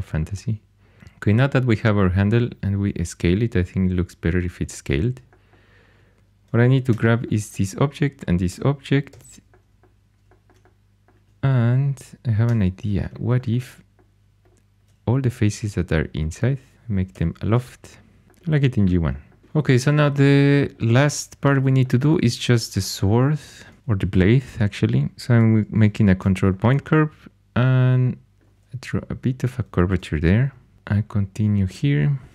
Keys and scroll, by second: 6.8 4, 9.0 shift+h, 12.4 3, 17.1 i, 18.2 Tab, 26.0 ctrl+super+c, 30.2 typing.